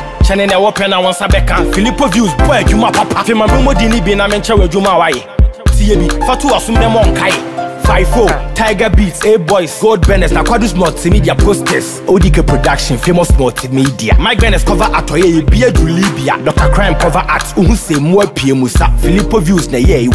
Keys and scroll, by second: 4.6 ctrl+t, 10.6 Return, 14.1 ctrl+j.